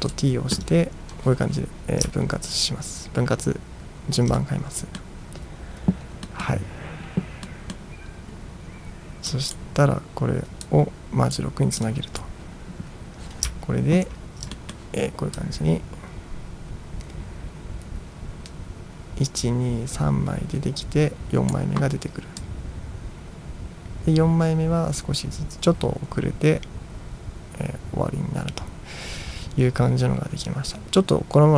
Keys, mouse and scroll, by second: 0.0 ctrl+t, 2.3-2.8 ctrl+scroll up 2, 2.8 ctrl+scroll down 1, 4.4-5.1 middle drag, 6.3 middle drag, 7.5-7.9 middle drag, 9.4 drag, 10.7-11.4 drag, 11.9 click, 13.6-14.3 ctrl+scroll down 1, 14.3 ctrl+scroll down 1, 14.6 middle drag, 15.4-21.6 drag, 17.8-19.6 middle drag, 22.5-31.5 drag.